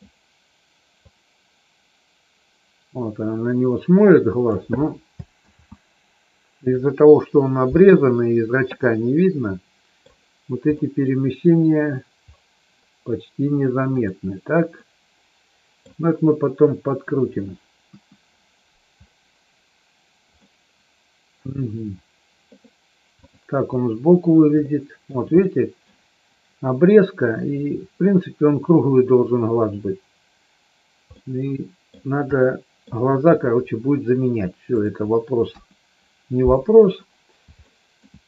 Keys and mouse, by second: 0.9-4.6 drag, 5.4 ctrl+z, 8.8-10.1 middle drag, 10.8 middle click, 13.8 click, 14.7-15.8 middle drag, 17.8 KP_1, 20.3-21.3 middle drag, 23.2 click, 24.6 shift+middle click, 25.4 middle click, 31.2 middle click, 32.3 middle click, 34.7 click, 35.4 KP_1, 37.6 middle click.